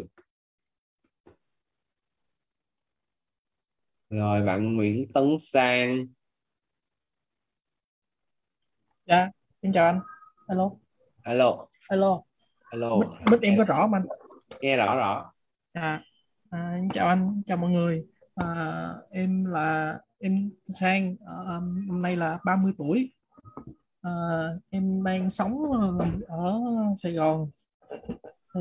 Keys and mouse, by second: 5.2 click, 15.8 click, 24.4-25.9 typing, 25.5 Left, 28.2-28.6 typing.